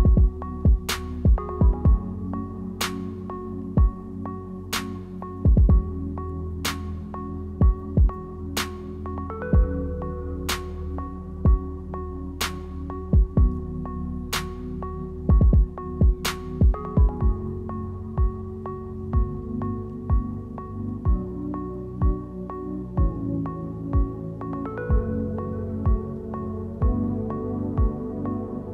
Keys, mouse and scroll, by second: 0.4 scroll up 8, 0.7 shift+middle click, 1.1 click, 1.5 Tab, 1.8 click, 2.2 h, 2.6 middle click, 3.3 click, 3.7 click, 3.9 Tab, 4.3 click, 5.2 scroll down 1, 6.0 scroll down 6, 6.0 middle click, 8.1 click, 8.3 shift+middle click, 8.6 scroll up 4, 8.8 shift+middle click, 9.4 click, 10.1 click, 10.7 click, 11.0 shift+click, 11.2 click, 11.5 shift+click, 11.7 shift+click, 11.9 shift+click, 12.0 click, 12.2 shift+click, 12.3 click, 12.5 shift+click, 12.8 ctrl+z, 13.1 shift+click, 13.2 shift+click, 13.4 shift+click, 13.6 shift+click, 13.8 shift+click, 14.0 shift+click, 14.2 shift+click, 14.3 shift+middle click, 14.6 shift+click, 14.9 shift+click, 15.0 shift+click, 15.2 shift+click, 15.4 shift+click, 15.6 shift+click, 15.7 shift+click, 15.9 shift+click, 16.1 shift+click, 16.2 shift+click, 16.4 shift+click, 16.5 shift+click, 16.8 ctrl+z, 16.9 ctrl+z, 17.1 shift+click, 17.4 shift+click, 17.5 shift+click, 17.7 shift+click, 17.7 s, 17.9 shift+click, 18.0 shift+click, 18.2 shift+click, 18.4 shift+click, 18.5 shift+click, 18.6 shift+click, 18.8 shift+click, 19.1 shift+click, 19.2 shift+click, 19.4 shift+click, 19.6 shift+click, 19.8 shift+middle click, 20.3 shift+click, 20.5 shift+click, 20.6 shift+click, 21.0 shift+click, 21.2 shift+click, 21.7 f, 21.9-22.9 scroll down 5, 22.3 middle click, 23.5 ctrl+s, 23.7 middle click, 24.5 click, 25.0 shift+middle click, 25.2-25.8 scroll up 5, 25.4 shift+middle click, 25.8 click, 27.0 click, 27.5 click, 28.6 click.